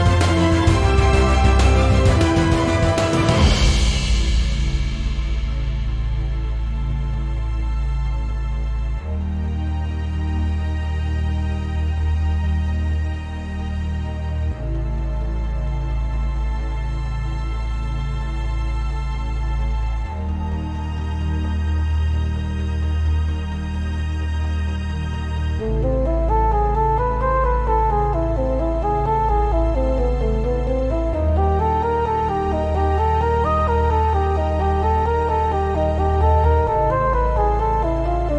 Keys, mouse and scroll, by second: 0.0 click, 1.4 click, 1.5 g, 2.6-3.0 scroll down 1, 3.0-3.3 scroll up 1, 3.3 click, 3.4 g, 3.9 click, 4.0 scroll down 1, 4.9-8.5 shift+middle drag, 6.2-7.5 scroll down 3, 7.5 scroll up 2, 8.0-8.5 scroll up 2, 8.5 click, 8.7 x, 9.1-9.6 scroll down 2, 9.6-10.1 scroll up 2, 10.1-10.7 scroll down 2, 10.7-11.6 shift+middle drag, 11.1-11.6 scroll up 2, 11.6 click, 12.6 x, 13.1 click, 14.0 f, 14.4 Escape, 14.7 Tab, 14.8-15.4 scroll down 2, 15.4-17.4 right drag, 17.4 click, 17.7 Tab, 17.9 scroll up 1, 18.4 click, 18.6 f, 19.2 click, 19.4 shift+click, 19.8 shift+drag, 20.0 shift+click, 20.2 f, 20.5 drag, 20.7 shift+click, 21.0-23.7 shift+middle drag, 21.2 scroll down 2, 21.3 f, 23.3-23.7 scroll down 2, 23.7 click, 24.2 f, 24.5 click, 24.8 f, 25.3-26.4 shift+middle drag, 25.5 f, 26.4 click, 27.1 shift+drag, 27.3 shift+click, 27.5 f, 27.9 click, 28.3 f, 29.0 ctrl+z, 29.3-29.9 shift+middle drag, 29.6-29.9 scroll up 2, 29.9 click, 30.2 shift+click, 30.6 shift+click, 30.9 shift+click, 31.1 f, 31.9 click, 32.2 g, 32.6 click, 32.7 x, 33.3 drag, 33.6 shift+click, 33.9 f, 34.4 right click, 34.6 ctrl+z, 35.6 shift+click, 36.2 f, 36.7 click, 37.1 f, 38.1 click.